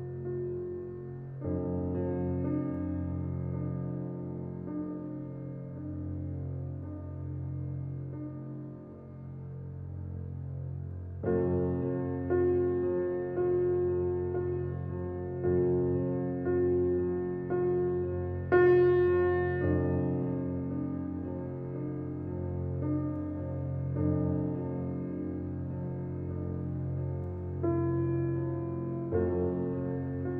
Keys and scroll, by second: 0.0-0.5 typing, 4.7 t, 5.0 e, 5.3 t, 5.7 e.